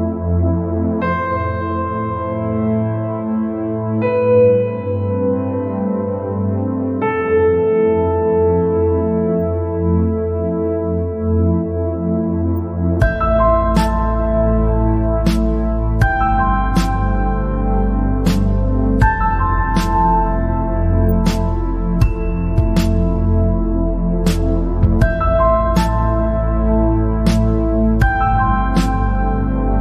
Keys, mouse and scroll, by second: 0.4 scroll down 1, 0.8 scroll up 1, 1.7 e, 6.3 alt+e, 9.8 scroll down 3, 10.4-10.8 scroll up 2, 11.1 scroll up 2, 13.4 click, 14.5 alt+click, 17.3 ctrl+b, 19.8 scroll up 2, 20.2-21.6 scroll down 2, 23.1 alt+click, 24.6 ctrl+b, 29.5 scroll up 2.